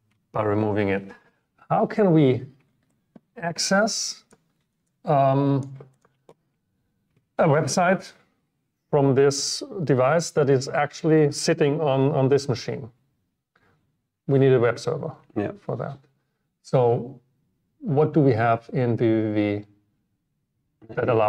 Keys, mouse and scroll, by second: 0.4-0.8 scroll down 2, 3.0 drag, 5.2 click, 7.4 click.